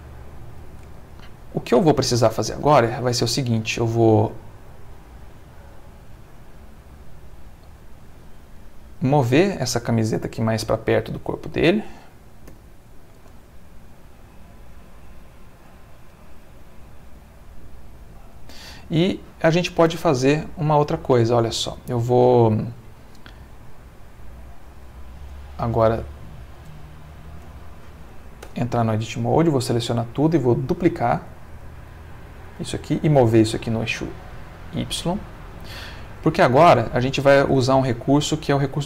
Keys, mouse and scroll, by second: 0.9 ctrl+middle click, 1.4 ctrl+middle click, 2.8 Tab, 3.2 middle click, 5.3 click, 6.0 click, 7.0 click, 8.6-9.6 middle drag, 12.4 g, 13.1 y, 14.7 click, 15.2-16.2 middle drag, 17.5 click, 18.3-20.0 middle drag, 25.7-26.8 middle drag, 28.4 Tab, 29.6 a, 32.4 shift+d, 33.4 y, 35.3 click, 35.8-37.6 middle drag.